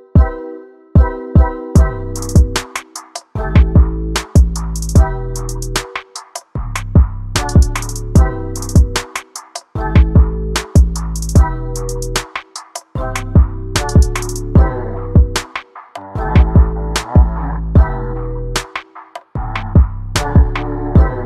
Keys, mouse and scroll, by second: 0.4 middle click, 0.7 click, 0.9 middle click, 1.7 click, 2.3 middle click, 2.7 click, 3.8 middle click, 3.9 click, 4.2 middle click, 4.4 click, 5.0 middle click, 5.6 scroll down 1, 5.7 scroll up 1, 5.8 middle click, 6.6-12.9 drag, 12.9 space, 13.0 space, 13.1 click, 13.4 space, 13.5 click, 13.7 middle click, 13.9 click, 14.9 click, 16.7-17.9 drag, 19.1 click, 19.4-19.8 scroll down 11, 19.8 click, 20.2 shift+right click, 21.1 shift+middle click.